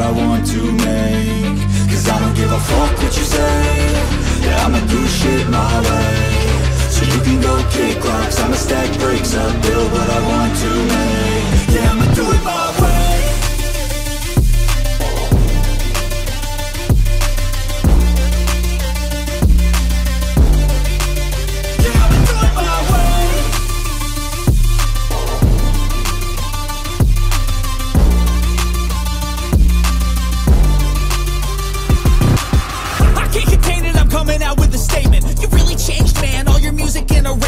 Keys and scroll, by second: 7.9 [, 8.1 [, 8.3 [.